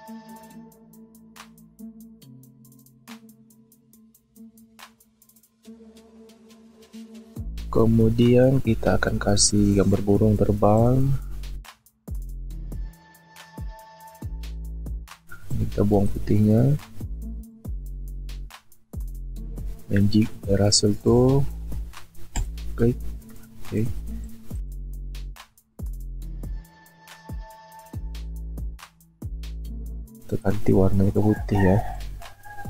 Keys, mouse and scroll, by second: 0.8 alt+shift+click, 3.0 shift+click, 5.4 shift+click, 25.2 ctrl+t, 26.1 alt+shift+click, 28.2 shift+click.